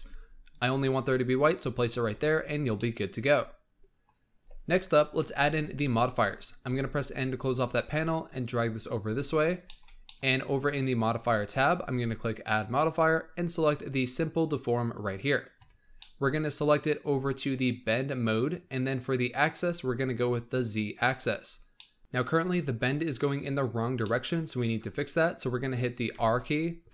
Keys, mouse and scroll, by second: 2.0 Tab, 2.4 scroll down 3, 2.7-6.6 middle drag, 6.6 n, 7.8-9.6 drag, 9.6-11.0 shift+middle drag, 11.0 click, 12.2 click, 15.0 click, 15.9-17.4 middle drag, 17.4 click, 20.4 click, 21.2-21.7 scroll down 3, 21.7 middle drag, 22.0-23.6 scroll up 2, 23.7 scroll down 1, 23.9-26.0 middle drag, 26.0 r.